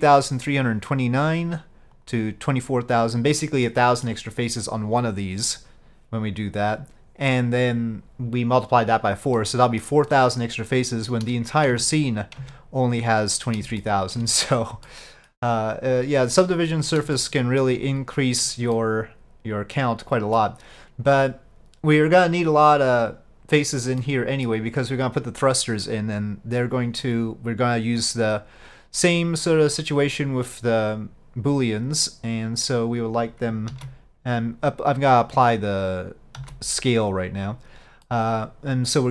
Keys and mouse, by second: 3.7 middle click, 9.4-9.9 middle drag, 11.8 Tab, 13.9-14.2 middle drag, 15.0 middle click, 16.4-17.0 middle drag, 17.2-17.7 shift+middle drag, 18.8-20.5 middle drag, 24.1-24.6 middle drag, 33.8 ctrl+a, 38.1-39.1 middle drag.